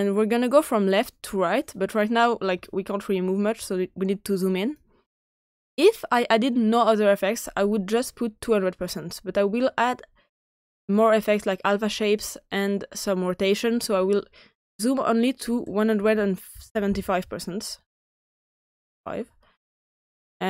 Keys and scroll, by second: 15.7-16.8 typing, 18.1-19.0 typing.